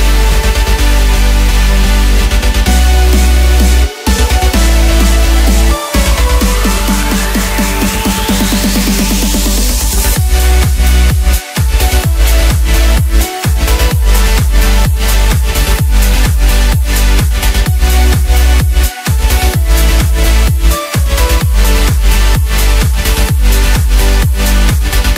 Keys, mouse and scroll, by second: 3.0 KP_1, 4.2 s, 8.2 scroll up 2, 8.8 g, 16.9-17.4 scroll up 1, 17.4 s, 20.7 right click, 21.4 scroll down 1, 21.7-22.7 middle drag, 22.7 drag, 23.0 scroll up 1, 23.3-23.6 scroll down 1, 23.6-25.1 middle drag.